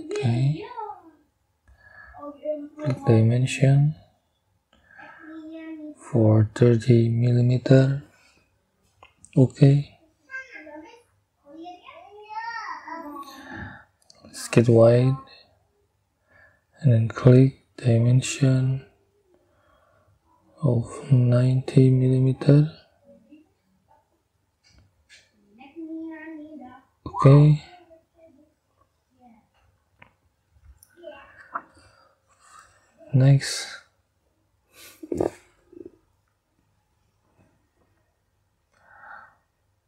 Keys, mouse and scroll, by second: 2.3 click, 4.6 click, 4.7 middle click, 6.7 3, 7.1 0, 9.1 click, 9.2 middle click, 10.0-10.6 scroll down 4, 11.9-14.1 drag, 15.9 click, 17.6 click, 24.1 9, 25.0 0, 26.8 click, 27.0 middle click, 28.1 scroll up 2, 37.4 scroll down 2, 37.9 scroll up 2.